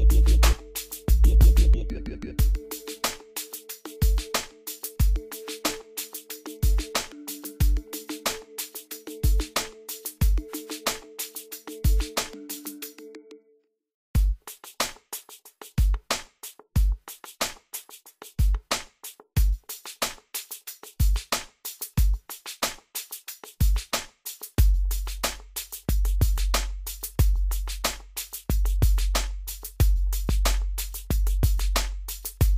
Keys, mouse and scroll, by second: 1.1-1.4 scroll down 1, 1.5-3.4 drag, 3.4-3.9 scroll down 1, 3.9 click, 3.9-16.6 drag, 16.6 scroll down 1, 17.5-21.2 drag, 21.2 scroll up 1, 22.3 scroll down 1, 23.4 scroll up 1, 23.9-24.3 scroll down 1, 25.8 scroll up 1, 26.1-27.1 scroll down 1, 27.4-27.9 scroll up 1, 27.9-29.8 scroll down 1, 30.2 click, 31.6-32.1 scroll up 1.